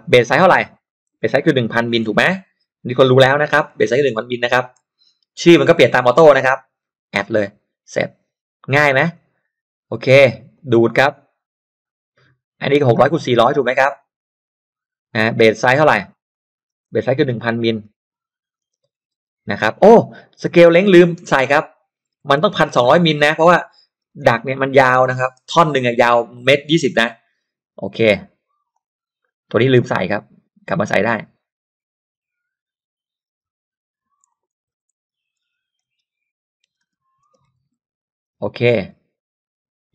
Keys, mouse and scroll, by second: 0.8 click, 1.7-3.6 typing, 4.7 m, 7.4 click, 9.1-10.6 drag, 11.8 click, 12.7-13.9 drag, 16.2 click, 17.1-19.3 typing, 20.3 click, 22.1-24.4 typing, 28.7-29.9 drag, 33.2-33.6 scroll down 1, 34.2 click, 34.7-38.2 typing.